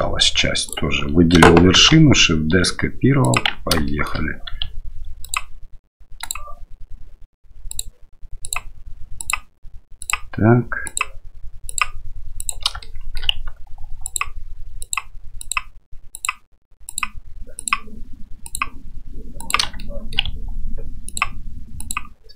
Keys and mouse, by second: 0.7 right click, 1.7 shift+d, 3.8 shift+middle click, 5.2 ctrl+click, 6.2 ctrl+click, 7.7 ctrl+click, 8.4 ctrl+click, 11.7 ctrl+click, 12.8 shift+middle click, 14.1 ctrl+click, 15.4 ctrl+click, 16.1 ctrl+click, 16.9 ctrl+click, 18.4 ctrl+click, 19.8 shift+middle click, 21.0 ctrl+click.